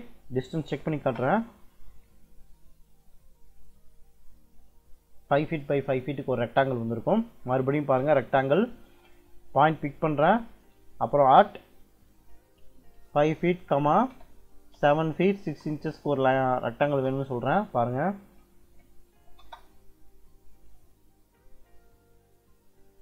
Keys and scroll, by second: 0.1-1.1 typing, 6.9-7.9 typing, 11.1 shift+2, 12.8 5, 13.3 ', 14.4-16.0 typing, 16.7 Return, 18.5 d, 19.1 i, 19.3 space, 20.8 Escape, 22.4 d, 22.9 i.